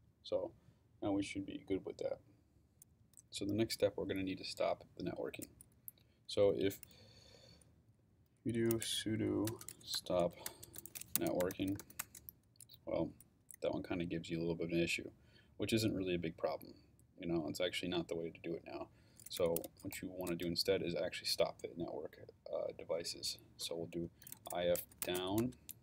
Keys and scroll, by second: 8.3-12.3 typing, 19.1-20.3 typing, 24.0-25.8 typing.